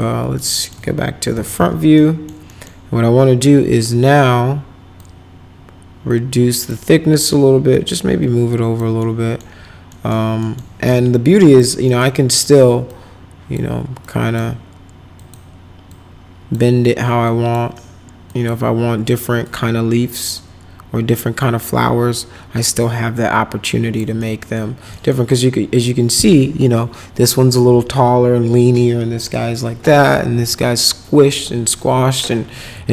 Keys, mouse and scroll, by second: 0.3 middle click, 1.1-2.0 typing, 1.9 middle click, 2.5 middle click, 4.9-6.7 drag, 7.7-8.7 drag, 9.0 middle click, 9.9 right click, 10.4 right click, 10.8 1, 11.4 click, 11.8 right click, 12.9 click, 14.0 click, 15.2 click, 15.9 click, 17.2 click, 18.2 click, 19.4-24.0 drag, 24.2 middle click, 24.9 middle click.